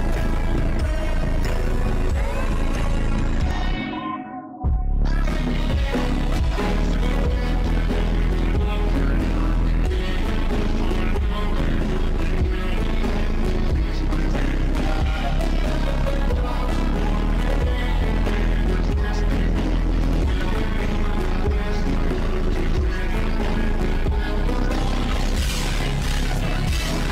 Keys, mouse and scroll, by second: 0.0 click, 0.7 click, 1.0 click, 1.8 ctrl+z, 1.9 click, 2.7 click, 3.0 click, 3.6 ctrl+z, 4.2 ctrl+z, 4.4 ctrl+z, 5.1 ctrl+z, 5.3 ctrl+z, 5.8 ctrl+z, 6.0 ctrl+z, 6.1 ctrl+z, 6.3 ctrl+z, 6.8 click, 7.3 ctrl+z, 7.8 click, 8.1 ctrl+z, 8.5 click, 8.9 click, 9.6 click, 10.3 click, 10.9 click, 12.0 click, 12.4 click, 13.4 ctrl+z, 13.5 click, 15.3 click, 15.7 click, 19.1-20.3 drag, 20.3 drag, 22.4 click, 22.9 click, 23.3-24.9 drag, 25.8-27.1 drag.